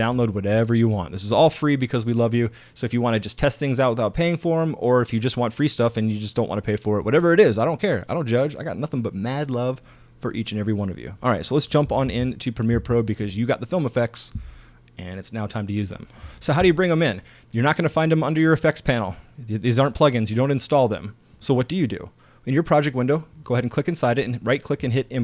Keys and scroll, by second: 12.1 super+Tab.